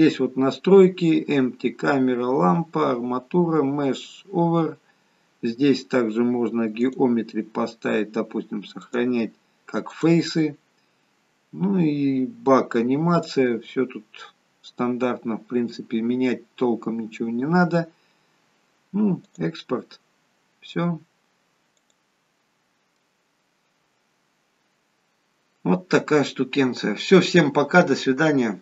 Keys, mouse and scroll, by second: 21.6 click, 22.8 click, 22.9 middle click.